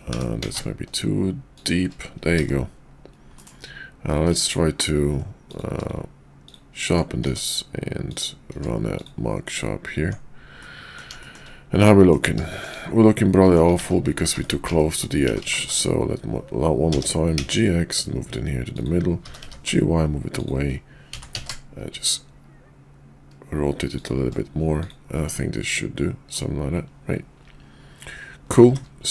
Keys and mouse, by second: 0.1 g, 2.3 shift+2, 3.4 middle click, 4.1 q, 5.3 click, 5.7 q, 7.2 Tab, 8.1 click, 8.6 q, 10.0 Tab, 10.6 middle click, 11.2 shift+middle click, 11.8 middle click, 12.5 shift+middle click, 13.4 middle click, 13.8 ctrl+z, 14.0 ctrl+z, 14.8 middle click, 15.3-15.6 ctrl+z, 16.8 g, 19.1 g, 21.1 r, 25.3-26.3 middle drag, 28.5 shift+2.